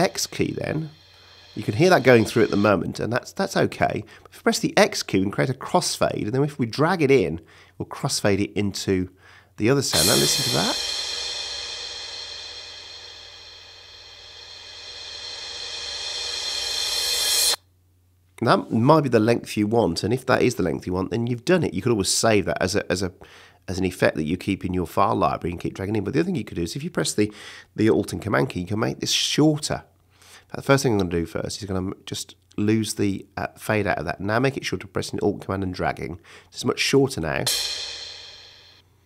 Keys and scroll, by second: 2.6 space, 4.2 x, 9.8 space, 18.1 space, 37.4 space.